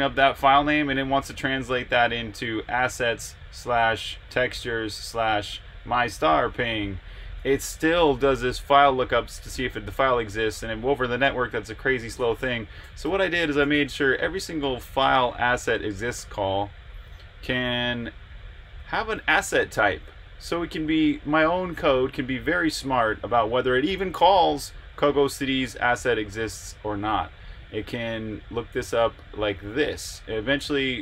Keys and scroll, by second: 12.3 Escape, 12.5-15.1 typing, 16.1 Return, 17.9-20.6 typing, 25.6 j, 27.4-29.6 typing.